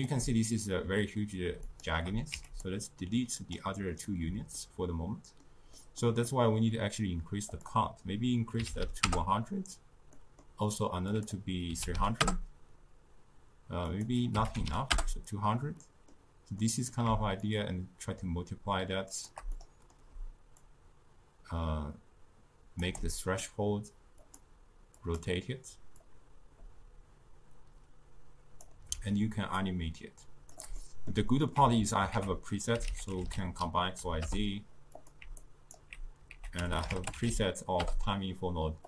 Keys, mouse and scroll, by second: 1.7 shift+click, 2.3 x, 3.5 click, 4.1-7.6 middle drag, 7.6-8.8 drag, 8.8 0, 10.2 middle click, 11.2 click, 12.0 0, 14.0 click, 14.7 0, 15.8-16.7 scroll up 2, 16.7 middle click, 17.5-19.6 shift+drag, 19.6-20.7 middle drag, 20.7-23.1 shift+drag, 23.1 scroll down 2, 23.2-24.3 middle drag, 24.3-29.1 drag, 29.6-30.8 shift+drag, 30.8-32.2 middle drag, 32.2 ctrl+a, 35.5-36.4 alt+right drag, 36.4 ctrl+a.